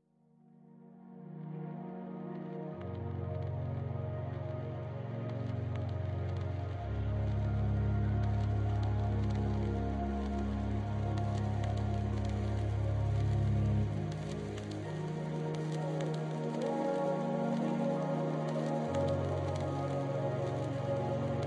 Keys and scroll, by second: 1.1-2.4 typing, 3.9 ctrl+s, 16.4 ctrl+s, 18.4 Right, 20.8 ctrl+s.